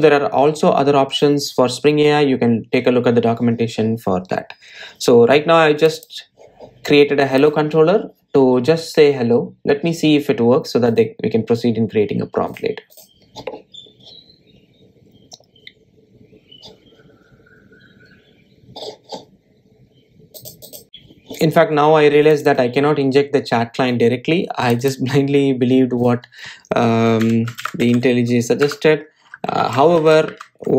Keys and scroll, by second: 29.7 Return.